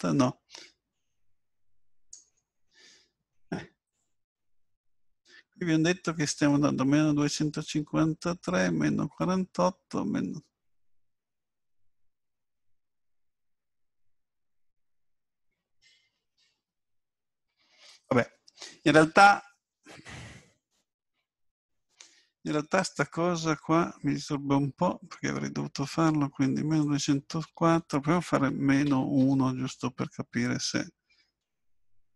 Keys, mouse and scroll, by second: 3.9 click, 26.8 click.